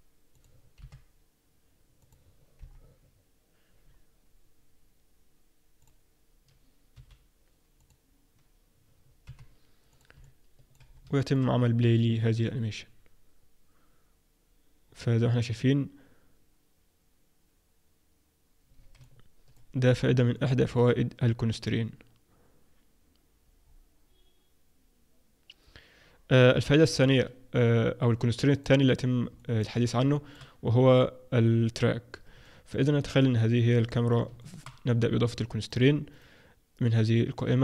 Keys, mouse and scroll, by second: 0.7 i, 2.6 KP_1, 3.8-4.6 scroll down 2, 6.2 click, 6.9 g, 9.3 i, 10.2 middle click, 10.9-11.2 scroll down 4, 11.2 shift+middle click, 11.9 click, 14.8-16.1 scroll up 1, 16.1-17.9 scroll up 1, 19.0 alt+middle click, 20.3 alt+middle click, 23.6-24.5 scroll up 2, 24.5-24.9 scroll up 1, 27.1 Escape, 28.1 click, 28.5 click, 29.3 middle click, 29.7-30.1 scroll down 4, 30.1 shift+middle click, 32.7 middle click, 32.9-33.5 scroll up 3, 33.5 click, 33.9 middle click, 34.3 shift+middle click, 35.6 click, 36.1 click.